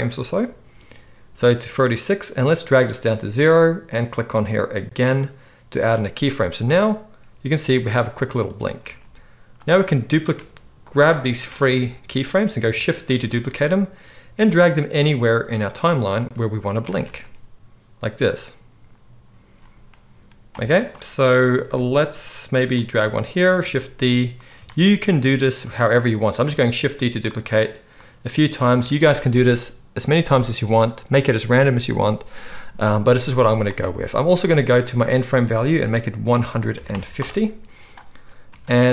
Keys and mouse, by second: 5.0-6.9 middle drag, 6.9-15.2 drag, 7.5 space, 8.9 space, 13.2 shift+d, 15.2-16.4 middle drag, 16.4-22.8 drag, 16.9 space, 20.5 space, 21.6 g, 22.8-27.9 middle drag, 23.7 shift+d, 24.6 shift+d, 26.4 shift+d, 27.9-38.9 drag, 28.6 space, 33.6 space, 38.4 space.